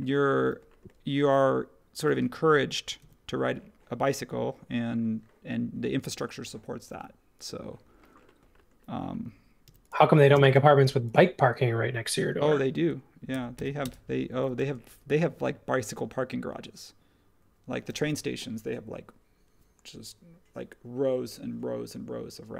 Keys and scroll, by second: 3.0 super+1, 9.6 m, 10.3 space, 10.8 m, 13.0-14.6 typing.